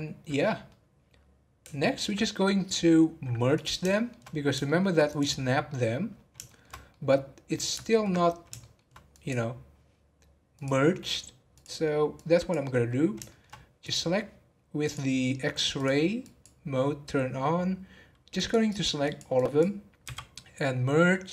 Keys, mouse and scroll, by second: 2.1-2.5 scroll up 7, 3.5 click, 3.9 shift+middle click, 4.6 shift+middle click, 5.1 click, 5.4 scroll down 2, 5.6 middle click, 6.1 scroll down 2, 6.4-8.2 shift+middle drag, 8.2 scroll up 1, 8.6-9.1 shift+middle drag, 9.1 click, 10.5-12.1 drag, 12.7-13.2 scroll up 2, 13.2 shift+middle click, 13.5-13.8 scroll up 1, 13.8 click, 14.8 click, 16.2 click, 18.7 click, 19.0 click, 20.0 m.